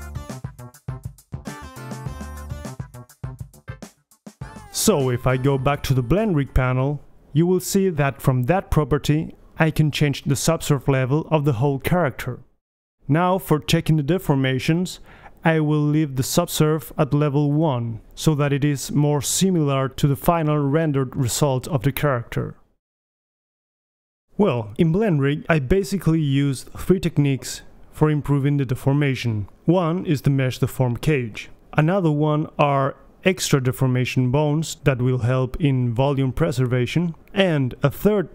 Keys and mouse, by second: 0.0-2.3 right drag, 0.3 h, 1.0 h, 2.3 Right, 2.4 Right, 2.4 Left, 2.7-3.6 middle drag, 3.2 alt+h, 3.4 a, 3.7-4.1 right drag, 4.1-5.5 middle drag, 6.3 right click, 7.1-7.7 middle drag, 7.7-8.2 right drag, 8.2 middle click, 8.7-11.4 drag, 10.5 right click, 11.4 middle drag, 11.9-13.7 drag, 14.0-16.5 drag, 17.8 KP_1, 19.6 click, 20.4-21.2 right drag, 21.2-21.8 middle drag, 21.8-24.9 drag, 24.9 right click, 25.0 click, 25.1 KP_3, 27.3-27.7 drag, 27.4-28.7 right drag, 28.7 click, 28.8-32.6 middle drag, 29.3 g.